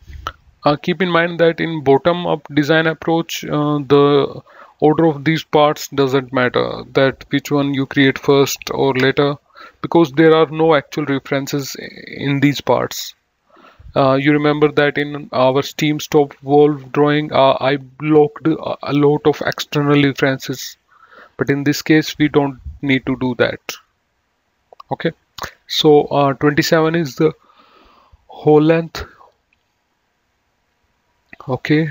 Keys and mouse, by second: 0.0-0.2 typing, 2.0 right click, 3.6 click, 14.9 click.